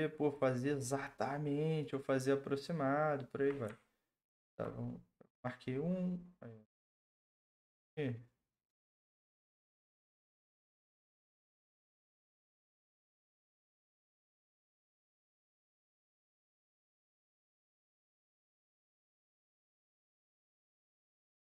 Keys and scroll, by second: 15.5 ctrl+z, 18.1 ctrl+z.